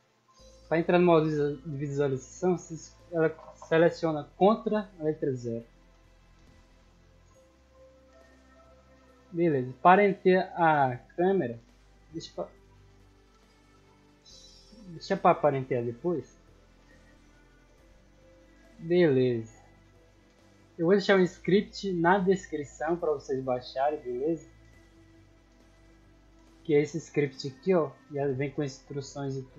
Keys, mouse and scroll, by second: 5.4-6.4 typing, 8.5 click, 8.9 middle click, 9.4 scroll down 1, 9.8-11.7 middle drag, 12.3-13.8 middle drag, 14.1 scroll up 1, 14.7-15.0 middle drag, 15.4-15.8 scroll down 1, 15.8 middle click, 17.5 click, 21.4-22.7 drag, 24.1 click, 25.0 click, 26.7 click, 28.3 click, 29.0 click, 29.4 ctrl+a.